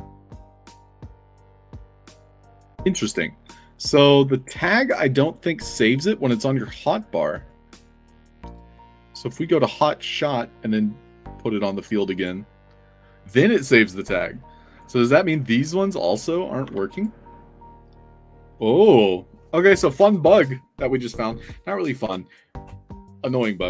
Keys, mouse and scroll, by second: 0.1 click, 0.3 click, 1.4 click, 1.4 i, 1.9 middle click, 4.9 click, 5.2 click, 5.5 click, 7.3 click, 9.5 click, 10.9 click, 11.8 i, 12.1 click, 12.5 scroll up 2, 14.7 click, 15.5 click, 16.6 i, 16.8 click, 17.3 middle drag.